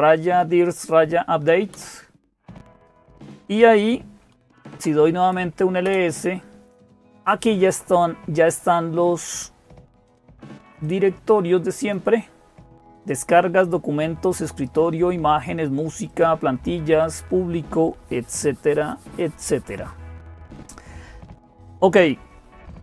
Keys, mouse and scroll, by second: 0.0-22.8 typing, 1.5 Return, 5.6 Return, 10.6-12.4 drag, 15.9-17.9 drag.